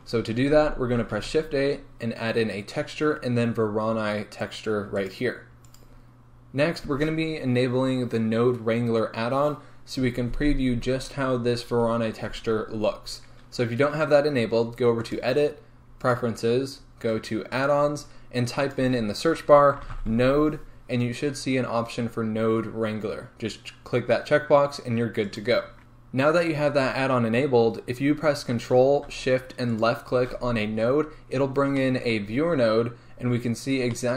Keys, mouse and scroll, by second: 16.3-25.8 drag, 25.8 z, 29.7 ctrl+shift+click.